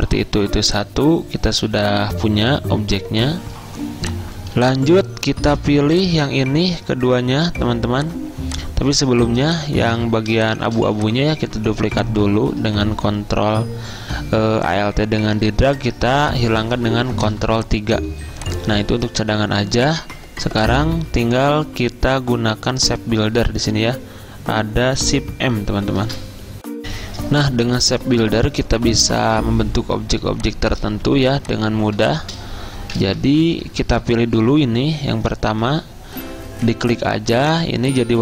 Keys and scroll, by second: 0.0-0.4 typing, 8.0 v, 16.7 ctrl+3, 26.1 m, 31.2 z, 33.7 m.